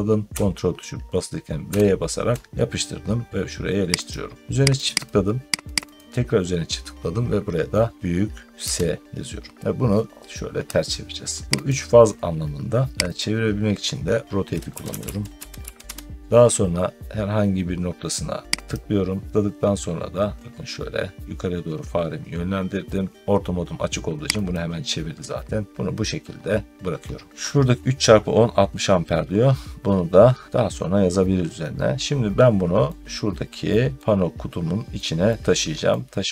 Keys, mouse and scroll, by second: 1.5 ctrl+v, 3.9 click, 4.7 click, 4.9 click, 5.6 click, 5.8 click, 8.5 s, 11.5 click, 13.0 click, 14.3-16.2 typing, 16.2 Return, 18.6 click, 20.1-23.1 drag, 24.4-27.3 drag, 27.3-29.8 middle drag, 33.8 middle click, 35.8 middle click.